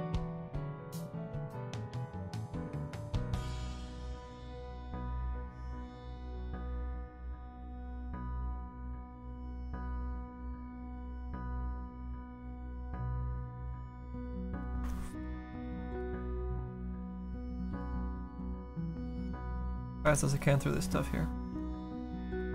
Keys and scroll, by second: 11.2 s, 17.8 s, 18.4 s.